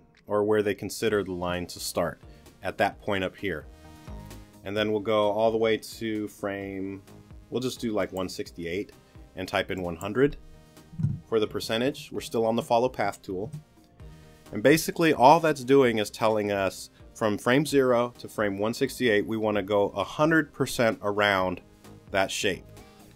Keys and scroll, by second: 10.9 l, 11.5 0, 13.4 Return.